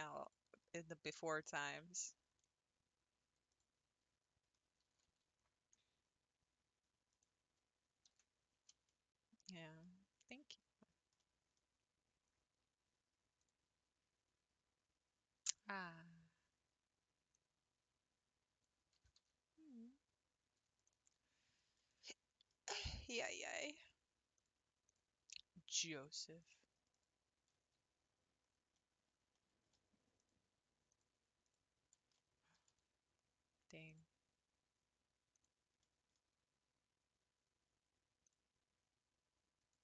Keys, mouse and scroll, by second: 0.2 click, 0.7 scroll up 1, 0.8 middle click, 1.6 s, 2.1 s, 4.6 scroll up 2, 4.9 g, 8.2 ctrl+s, 8.9-13.4 middle drag, 13.4 click, 15.5 click, 17.3 click, 19.0 g, 22.0-24.4 shift+middle drag, 24.4 alt+click, 24.9 alt+click, 25.7 alt+click, 26.4 alt+click, 26.9 alt+click, 28.7-30.2 middle drag, 30.2 alt+click, 30.9 alt+click, 31.4 alt+click, 32.2 middle click, 32.7 g, 35.5 click, 35.8-38.3 middle drag, 38.3 click, 39.7 click.